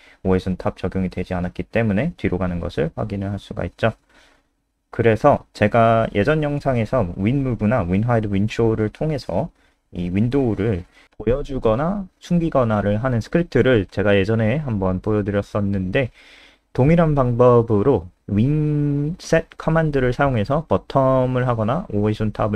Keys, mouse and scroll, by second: 3.4 F5, 7.9 click, 8.2-8.8 scroll down 2, 8.8-9.7 scroll down 1, 9.7 click, 9.8 Home, 10.4-10.9 scroll down 2, 11.8 shift+click, 12.2 ctrl+c, 12.5 click, 12.7 alt+F4, 13.1 click, 16.0 ctrl+v, 16.2 ctrl+s, 16.6-17.0 scroll up 7, 18.7-19.3 scroll down 3, 20.5 scroll down 2.